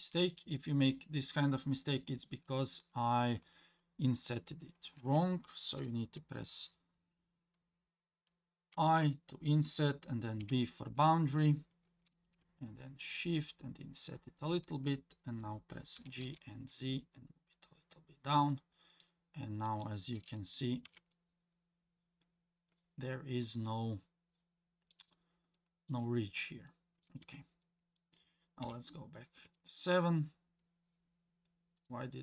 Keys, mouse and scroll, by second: 4.4 ctrl+z, 16.0 g, 19.0 scroll up 1, 19.0 middle click, 20.2-20.8 scroll down 2, 20.8 Tab, 21.1-24.9 middle drag, 25.5-25.9 middle drag, 26.7-27.1 middle drag, 27.2 Tab, 27.6 middle click, 28.6 KP_7, 29.6 shift+middle click, 30.2 scroll up 3, 31.8-32.2 drag.